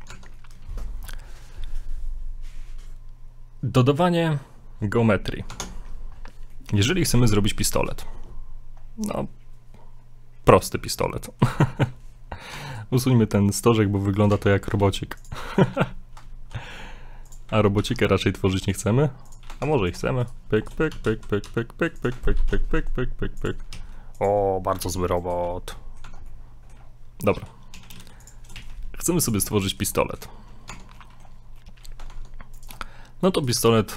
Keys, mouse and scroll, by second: 0.1 Tab, 0.3 middle click, 0.7 shift+middle click, 1.0 scroll up 1, 5.5 Tab, 6.1 scroll down 2, 6.5 middle click, 7.3 middle click, 7.5-7.8 scroll down 1, 7.9 middle click, 8.1 scroll up 2, 8.8 scroll down 1, 10.5 right click, 11.2 middle click, 12.6 Tab, 12.7 right click, 13.0 middle click, 13.7 x, 14.2 right click, 14.3 Tab, 14.4 scroll up 3, 14.8 ctrl+r, 16.4 ctrl+b, 17.8 ctrl+r, 19.6 ctrl+Tab, 20.2 right click, 20.6 shift+right click, 20.9 s, 22.4 ctrl+shift+b, 23.8 e, 24.8 ctrl+r, 25.7 middle click, 26.0 middle click, 26.0 Tab, 26.3 middle click, 26.9-27.4 scroll down 4, 27.4-28.6 typing, 29.5 middle click, 30.0 shift+middle click, 30.4-30.7 scroll up 2, 30.7 Tab, 31.0 middle click, 31.6 middle click, 32.1 ctrl+Tab, 33.4 right click, 33.6 right click, 33.7 scroll down 2, 33.8 middle click.